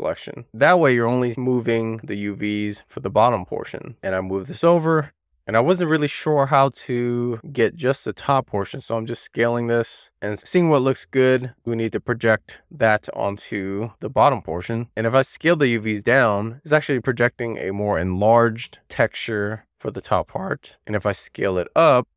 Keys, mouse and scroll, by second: 1.1-1.5 drag, 2.5-3.1 drag, 3.9 scroll down 2, 4.0 click, 8.0 e, 8.6 r, 9.3 click, 11.1-11.6 scroll up 2, 11.6 w, 12.4 click, 14.4 e, 14.9 r, 15.0 click, 16.6 w, 16.8 click, 20.4 e, 20.6 r, 21.1 click.